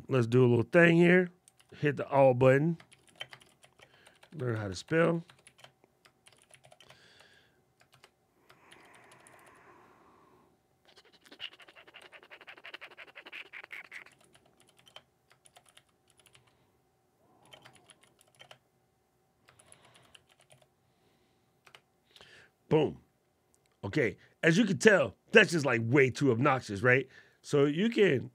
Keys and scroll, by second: 1.3 super+a, 2.6 shift+d, 3.1 shift+r, 6.0 shift+r, 7.6 shift+Return, 8.4 shift+c, 15.2 shift+m, 17.5 shift+e, 19.3 shift+n.